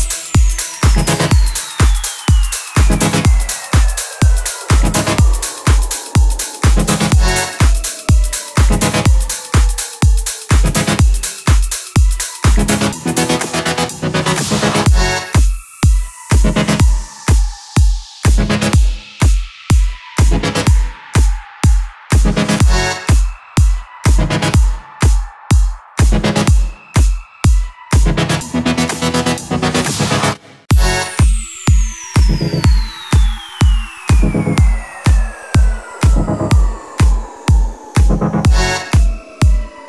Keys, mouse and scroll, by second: 0.6 click, 2.3 alt+scroll up 1, 3.3-4.8 drag, 5.8-7.0 shift+drag, 7.7-8.6 alt+scroll down 1, 8.6 alt+scroll up 1, 9.6-14.9 drag, 20.3-20.7 alt+scroll up 1, 22.4-24.0 alt+shift+drag, 25.6 right click, 27.3 click, 29.4 Right, 31.6-32.7 alt+shift+drag, 34.3 alt+scroll down 1, 35.4 alt+scroll up 1, 36.0 alt+scroll down 1, 36.7-39.1 drag, 39.6-39.8 alt+scroll up 1.